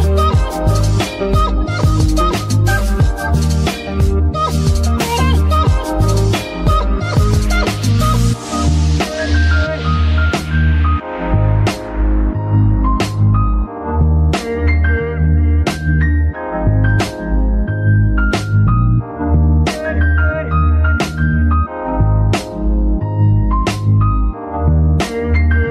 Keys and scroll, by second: 3.3 Tab, 13.3 Escape, 24.1 Num_Lock.